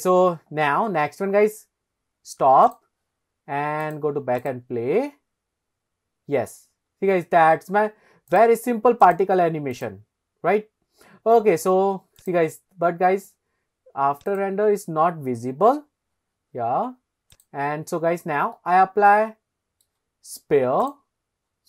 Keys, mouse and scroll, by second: 2.7 click, 4.4 click, 7.0-7.9 scroll up 2, 8.3 click, 9.0 click, 9.7 click, 12.2 click, 12.8-14.6 scroll up 1, 15.8 click, 17.3 click, 18.0-18.5 scroll down 1, 18.5-19.8 middle drag, 18.5 scroll down 1, 20.8-21.2 drag.